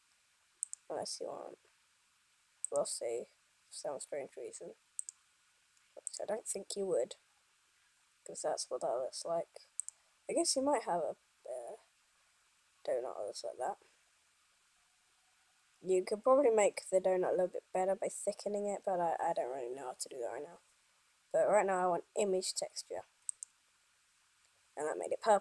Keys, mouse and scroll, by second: 5.8 click.